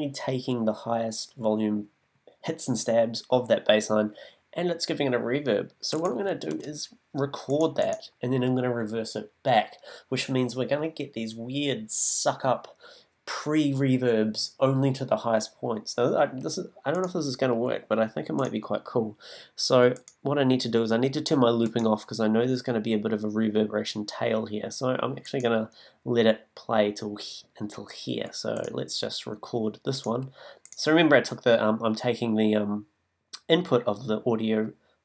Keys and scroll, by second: 6.5 super+t.